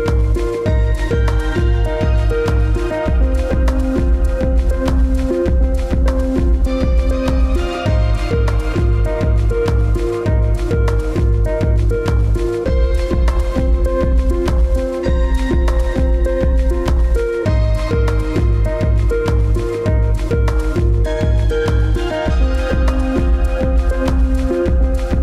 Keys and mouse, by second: 1.2-5.9 middle drag, 8.1-11.4 middle drag, 12.7-13.2 middle drag, 13.7 click, 15.3 click, 15.9-16.9 middle drag, 17.6-19.1 middle drag, 19.5-21.3 middle drag, 22.3-23.6 middle drag.